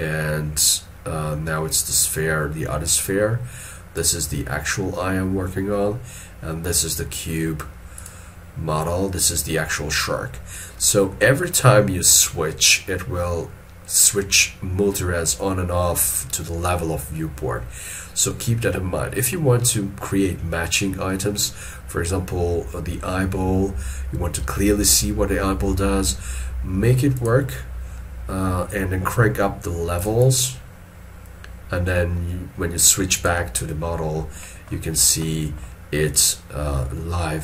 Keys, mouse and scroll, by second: 1.2-4.2 scroll down 1, 30.2 double click, 34.4 middle click.